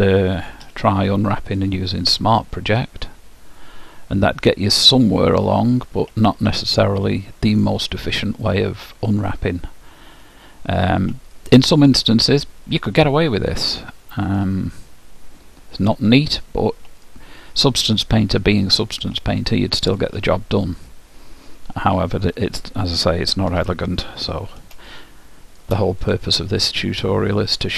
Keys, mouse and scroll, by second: 0.8 u, 4.5-22.8 middle drag, 23.6 Tab, 25.0-27.7 middle drag, 26.3-27.7 drag.